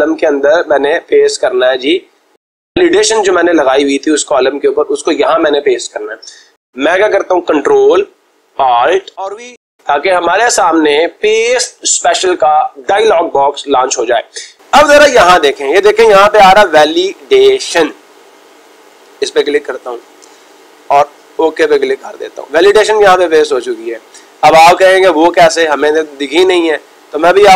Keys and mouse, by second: 0.6-1.7 drag, 2.4-3.6 drag, 5.1-6.2 drag, 19.1-20.1 drag, 21.1-22.2 drag.